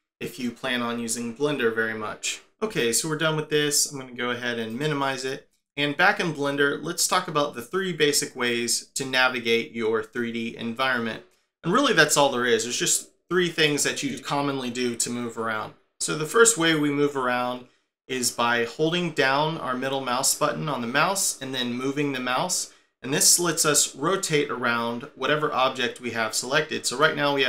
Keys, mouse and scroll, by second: 18.8 middle click.